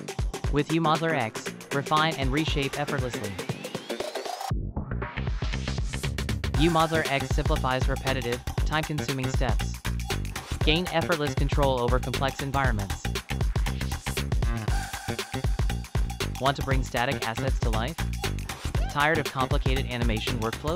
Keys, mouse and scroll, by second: 0.3 middle click, 2.5-3.4 click, 2.6 click, 2.7 click, 3.1 click, 3.2 click, 3.5 click.